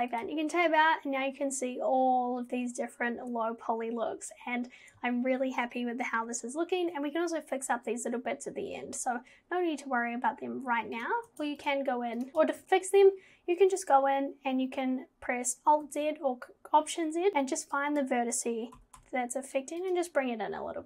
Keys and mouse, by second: 11.0 click, 11.3 Tab, 11.6 click, 12.2 click, 12.3 Tab, 15.9 alt+z, 17.9 click, 18.8 g.